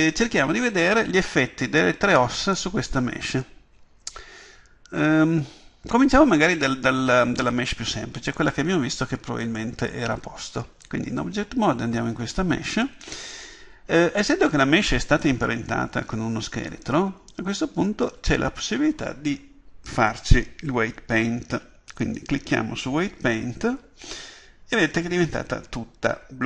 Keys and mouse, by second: 16.7-18.5 drag.